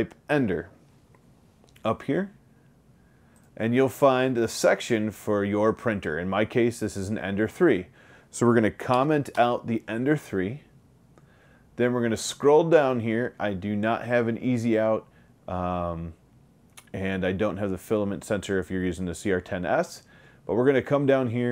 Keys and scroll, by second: 9.4 BackSpace.